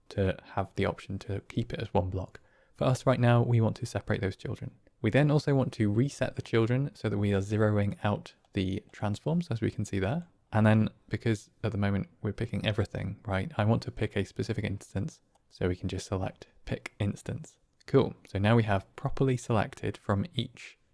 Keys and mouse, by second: 7.8 middle click, 8.7 middle click, 10.0 middle click, 15.2 middle click, 17.6 middle click.